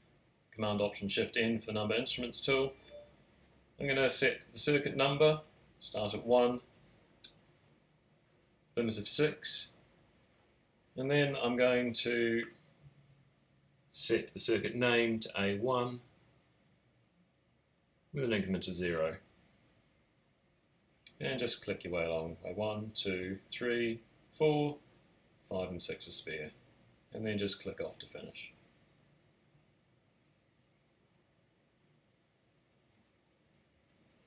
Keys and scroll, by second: 1.6 Tab, 2.1 typing, 5.3 typing, 6.3 Tab, 6.5 Tab, 6.8 Tab, 7.8 typing, 12.5-13.8 typing, 17.4 typing.